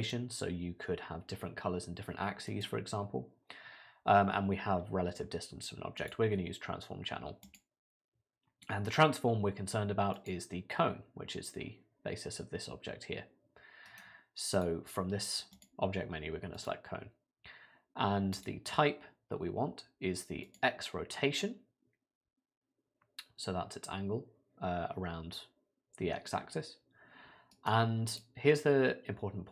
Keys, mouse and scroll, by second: 13.9 right click, 27.5 right click.